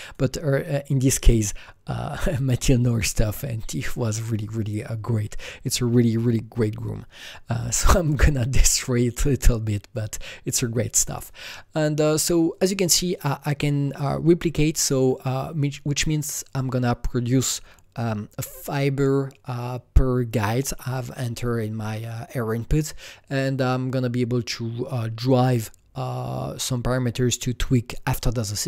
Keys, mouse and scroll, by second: 0.0 click, 12.6 click, 15.0 click.